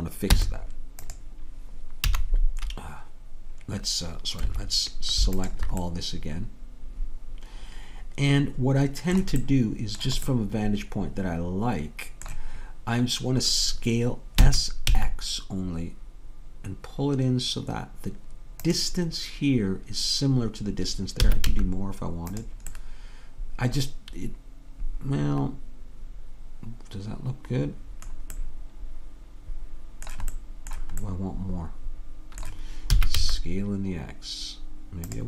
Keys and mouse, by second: 0.3 Tab, 2.1 z, 5.5 click, 5.9-10.3 drag, 14.4 s, 21.2 s, 28.9-30.6 middle drag, 32.9 s.